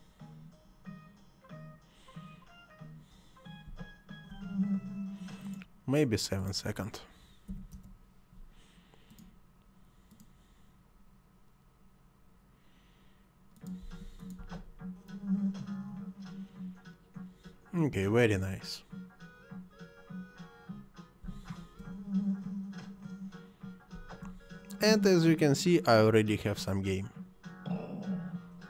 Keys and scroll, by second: 3.6 space, 7.4 7, 7.7 Return, 13.8 space, 21.2 space, 23.9 space.